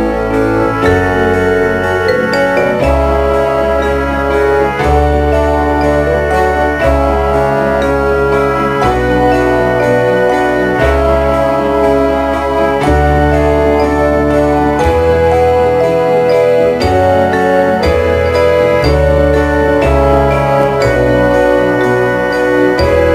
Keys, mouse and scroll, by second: 0.0 click, 0.8 e, 2.6 click, 4.0 right click, 5.7 e, 9.4 click, 10.2 e, 12.1 click, 12.6 e, 15.4 click, 16.1 e, 18.5 click.